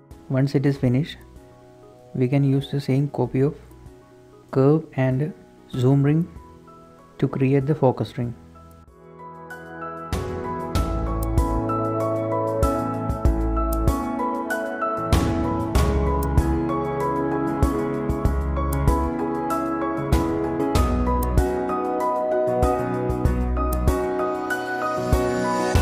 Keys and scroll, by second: 0.0-1.7 typing, 0.0 Escape, 0.0 Tab, 4.0 shift+z, 5.0 Tab, 5.1 Tab, 5.3 z, 6.1 Tab, 6.3 Tab, 7.3 Escape, 7.6 z, 7.9 Tab, 8.4 z, 10.4 Tab, 10.5 typing, 12.4 Tab, 12.5 Tab, 13.0 shift+Tab, 13.2 z, 13.8 a, 15.2-19.9 typing, 21.3 Escape, 21.8-25.2 typing.